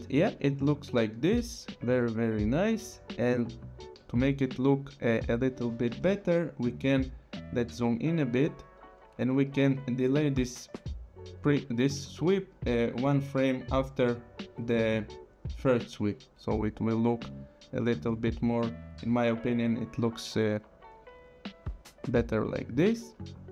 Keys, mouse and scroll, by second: 0.2 click, 5.1 click, 7.7 click, 9.4 click, 10.1 click.